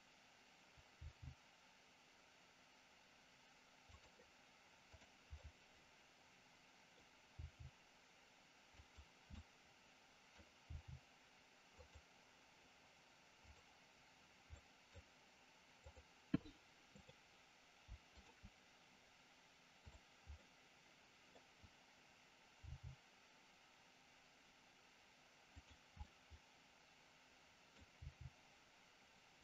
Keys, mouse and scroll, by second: 0.9 g, 4.9 click, 5.3 scroll up 1, 5.5-6.8 middle drag, 6.8 scroll down 1, 7.3 g, 8.7 click, 9.3 scroll up 1, 9.5 middle click, 10.3 scroll down 1, 10.6 g, 13.5 click, 14.5 middle click, 18.1 shift+click, 19.8 click, 20.3-21.3 middle drag, 22.6 g, 25.6 click, 25.9-27.8 middle drag, 27.9 g, 29.3 click.